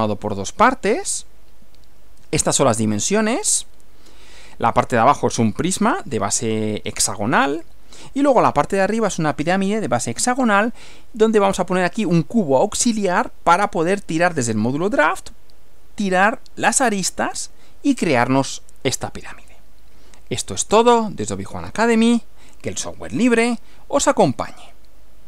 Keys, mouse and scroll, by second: 1.0 Right, 7.6 Right, 23.4 click.